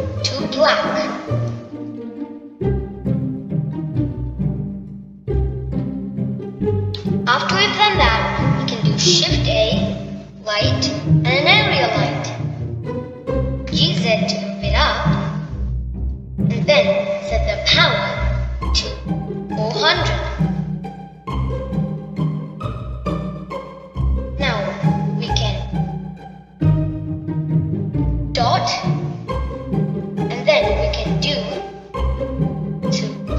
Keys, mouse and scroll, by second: 3.7-6.7 middle drag, 11.1 shift+a, 15.5 g, 19.6-22.4 drag, 22.4 0, 29.9 ..